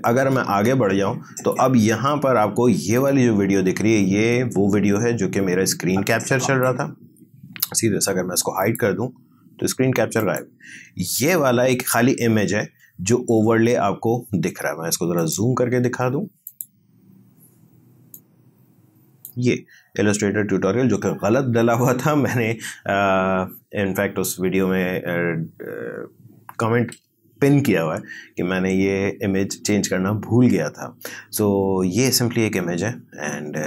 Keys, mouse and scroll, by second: 0.3-2.0 drag, 2.0-3.0 scroll down 1, 3.0 click, 5.7-13.0 drag, 15.2-21.8 drag.